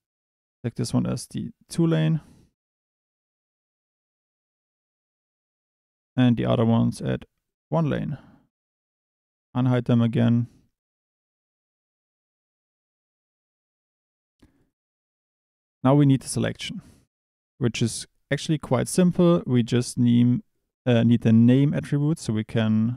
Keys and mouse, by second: 2.1 click, 5.8 h, 6.1 a, 7.6-8.0 drag, 8.8 alt+h, 9.4 Tab, 14.6 click.